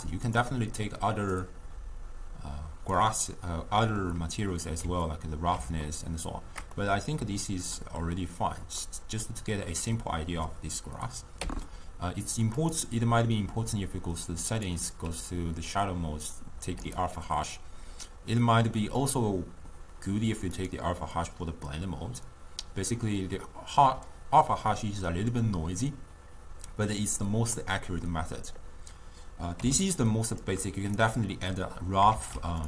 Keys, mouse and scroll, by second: 1.4-3.1 drag, 4.0-17.2 middle drag, 17.2 click, 20.9-22.7 drag, 32.2 shift+d.